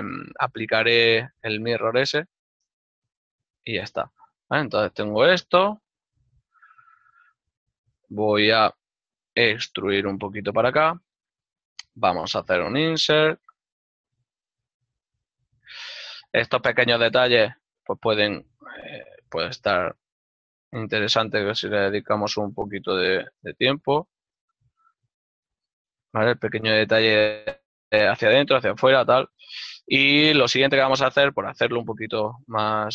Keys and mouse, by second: 0.1 click, 1.9 ctrl+middle click, 7.8 KP_Decimal, 8.0 middle click, 9.7 e, 10.7 click, 15.3 click, 16.3 ctrl+middle click, 18.1 click, 24.5 shift+click, 25.2 ctrl+middle click, 29.1 ctrl+middle click.